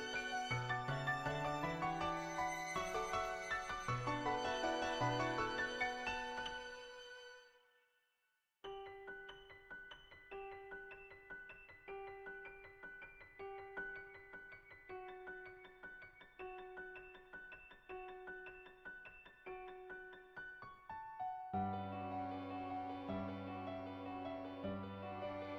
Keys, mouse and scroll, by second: 4.6 click, 4.9 click, 5.3 click, 5.7 [, 6.3 [, 6.5 [, 6.7 [, 6.9 click, 7.9 click, 10.4 click, 11.2 ], 11.4 click, 12.0 ctrl+z, 12.2 ], 12.3 click, 12.7 click, 13.1 click, 13.6 click, 14.2 click, 14.6 ctrl+z, 14.7 ctrl+z, 14.9 [, 15.2 click, 15.5-16.7 drag, 16.7 ], 16.9 ], 20.8 ], 20.9 ], 20.9 click, 21.3 click, 23.4 click.